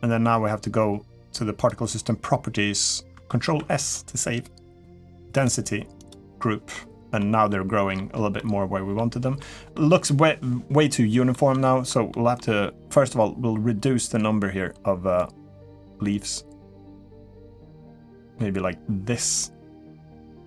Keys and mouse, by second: 3.2 ctrl+s, 5.2 click, 6.5 middle click, 7.3 middle click, 8.1 middle click, 9.2 middle click, 10.0-11.1 middle drag, 11.4 shift+middle drag, 11.9 middle drag, 15.0-20.4 drag.